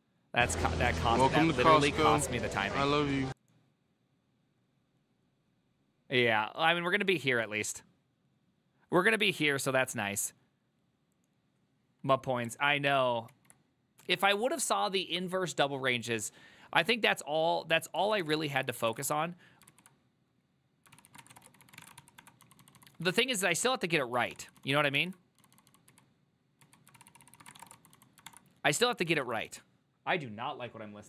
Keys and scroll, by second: 18.3-19.6 typing, 18.5 ctrl+c, 18.6 ctrl+c, 18.7 ctrl+c, 19.8 ctrl+u, 21.0 ctrl+c, 21.0-29.6 typing, 27.1 ctrl+c, 27.2 ctrl+c.